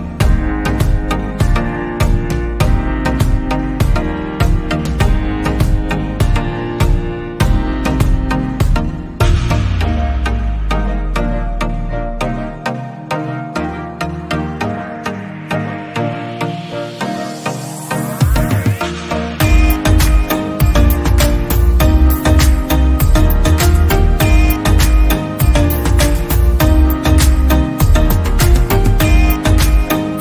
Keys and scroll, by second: 7.0 ctrl+c, 7.2 ctrl+v, 12.2 ctrl+a, 13.3-13.8 typing, 21.6 ctrl+z, 24.7 ctrl+shift+], 26.6 ctrl+shift+], 28.9 Right, 29.6 Right.